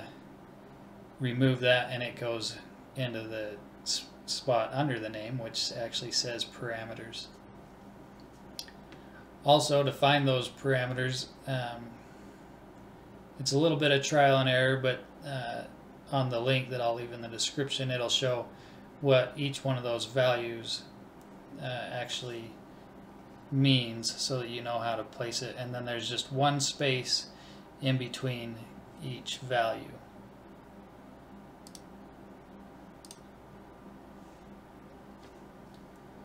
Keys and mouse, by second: 2.4-4.3 drag, 12.4-14.2 drag, 21.9-24.2 middle drag, 24.7-26.4 middle drag, 27.8 shift+d, 33.9-36.2 middle drag, 35.5-36.2 drag.